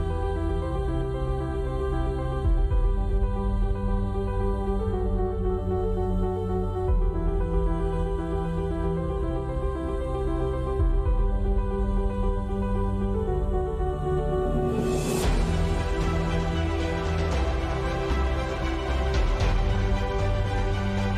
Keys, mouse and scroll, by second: 0.3 click, 0.8 click, 1.5 click, 1.9 middle click, 2.3 Tab, 2.7 Tab, 2.8 Tab, 3.0 Tab, 3.6 ctrl+b, 4.6-6.5 drag, 4.7 z, 6.5 z, 7.2 middle click, 7.6 middle click, 8.4 right click, 8.9 z, 10.1 ctrl+b, 10.7 Tab, 14.9 Tab, 16.8 ctrl+b, 16.8 click, 17.8 click, 18.1-19.1 drag, 18.3 ctrl+b, 19.2 click, 19.3 z, 19.9 z, 20.2 j, 20.7 ctrl+Delete.